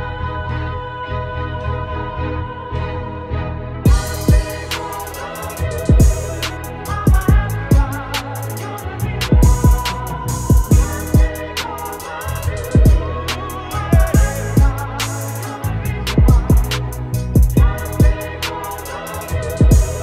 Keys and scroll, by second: 2.6 Return, 4.6 ctrl+t, 17.2 ctrl+Return.